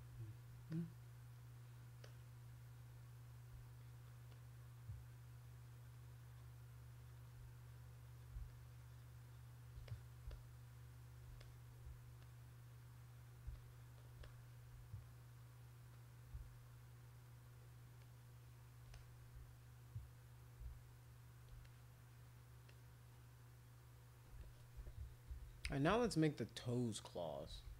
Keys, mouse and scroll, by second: 0.7 click, 2.0 click, 3.8 alt+click, 4.1 alt+click, 4.3-7.1 alt+drag, 7.6 click, 7.9 click, 8.5-9.7 shift+drag, 9.9 click, 10.3 shift+click, 11.4 click, 11.7 scroll up 2, 12.2-13.3 alt+drag, 13.5 shift+click, 13.8 shift+click, 13.9 shift+click, 14.2 click, 15.0 alt+click, 15.4 alt+click, 15.9 alt+click, 16.4 shift+click, 16.5 shift+click, 16.7 shift+click, 18.0 shift+click, 18.9 click, 19.6 alt+click, 20.7 shift+click, 21.6 click, 22.7 click, 25.0-27.7 typing.